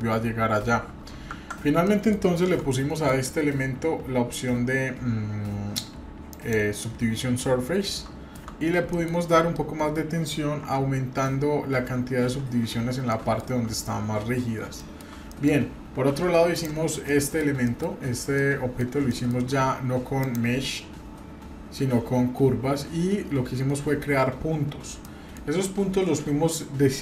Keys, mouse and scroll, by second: 1.8 middle click, 2.4 Tab, 2.7 middle click, 6.3 click, 7.9 middle click, 8.5-8.8 scroll up 2, 8.9 shift+middle click, 9.2 scroll up 2, 10.7 Tab, 11.1-11.5 scroll up 2, 11.5-12.4 scroll down 1, 13.1 shift+middle click, 14.0-14.6 scroll down 3, 14.8 shift+middle click, 15.3 middle click, 16.2 Tab, 16.5 click, 17.1 middle click, 17.6 shift+middle click, 18.3 middle click, 19.0-19.4 shift+middle drag, 20.2-24.6 drag, 25.0 middle click.